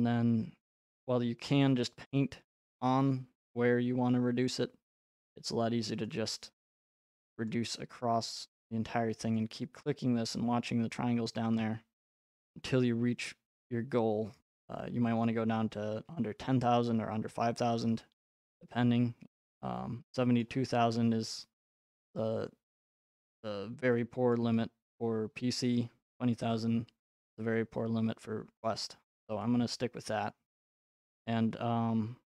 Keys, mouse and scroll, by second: 6.1 click, 7.5 click, 9.4 click, 12.1 click, 20.4 right click, 24.3 right click, 28.7 right click, 29.0 scroll, 30.5 right click, 30.8-31.1 scroll.